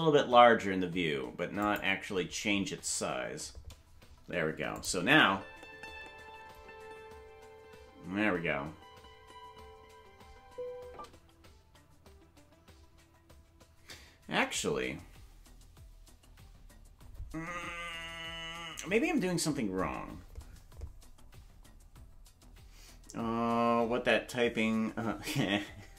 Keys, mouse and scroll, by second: 4.7 click, 5.1 space, 10.9 space.